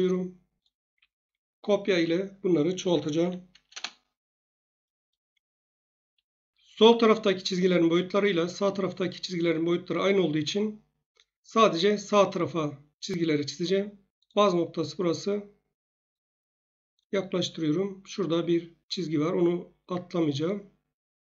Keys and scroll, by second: 0.9 Escape, 2.9-3.2 typing, 3.7 Return.